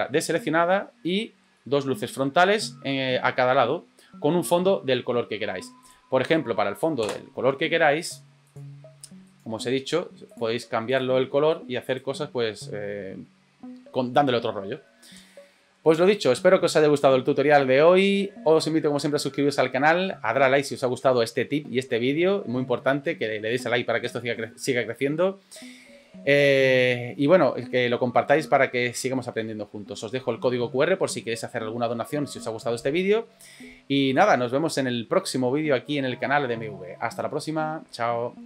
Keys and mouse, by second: 1.1 middle drag, 1.6-4.5 middle drag, 7.0 KP_0, 8.4 click, 9.3 right click, 10.9 click.